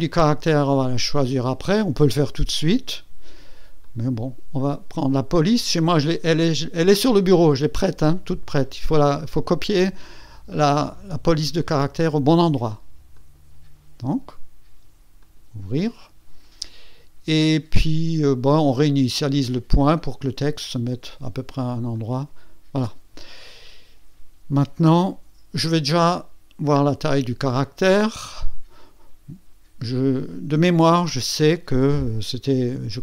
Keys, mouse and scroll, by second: 3.8 click, 13.1 click, 13.6 click, 15.2 click, 15.4 click, 20.0 click, 21.9 click, 32.9 click.